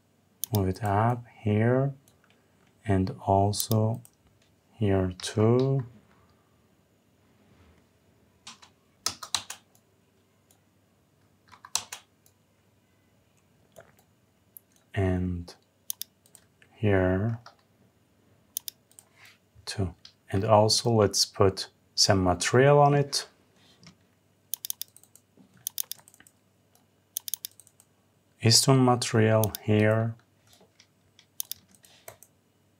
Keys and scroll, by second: 4.9 Left, 5.2 Right, 9.0 Return, 16.9 Left, 23.8 ctrl+d.